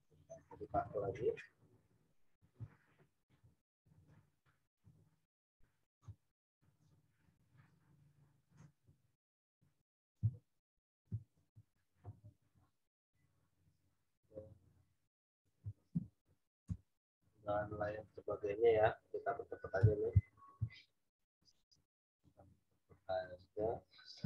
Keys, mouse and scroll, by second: 0.4 right click, 1.8 click, 2.8 alt+Tab, 3.8 ctrl+v, 4.8 w, 5.6 click, 6.7 shift+click, 11.1 m, 11.2 click, 12.0 ctrl+t, 12.9 alt+shift+click, 15.9 Return, 16.6 v, 17.2 click, 20.1 ctrl+t, 20.8 alt+shift+click.